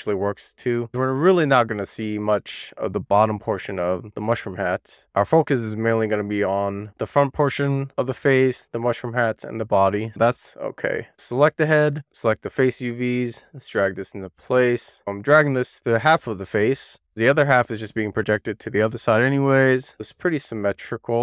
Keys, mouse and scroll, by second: 2.5 e, 2.7 click, 3.2 w, 3.4 click, 6.9 scroll down 1, 7.2 middle click, 8.6 scroll down 1, 8.8 click, 11.1 click, 11.4 Tab, 12.7 a, 13.1-13.4 scroll down 3, 13.4 shift+middle click, 14.0-14.5 scroll up 1, 14.7 scroll up 2, 14.8 shift+middle click, 15.0-15.5 scroll down 1, 15.5 click, 15.9-16.6 scroll up 6, 16.2 shift+middle click, 16.6 shift+middle click, 16.8 scroll down 1, 17.0 shift+middle click, 17.4 click.